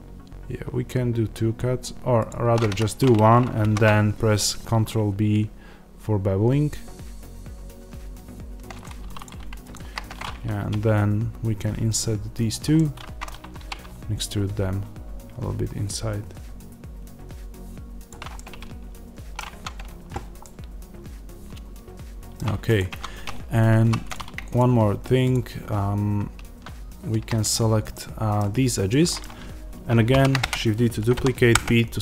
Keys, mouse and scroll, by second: 2.6 Escape, 3.5 ctrl+b, 8.9 3, 9.1 click, 10.5 i, 12.4 click, 12.6-18.0 middle drag, 13.5 e, 18.0 click, 18.2-22.7 middle drag, 19.4 Tab, 22.7 click, 22.8 Tab, 23.7 2, 24.0 click, 27.8-32.0 middle drag, 30.0 shift+d, 30.4 Return, 31.4 p, 31.5 Return.